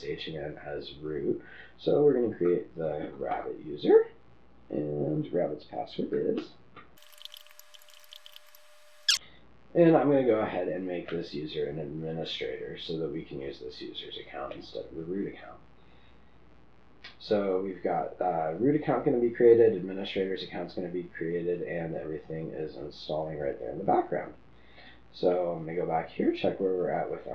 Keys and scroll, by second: 2.7-3.7 typing, 6.9-8.6 typing.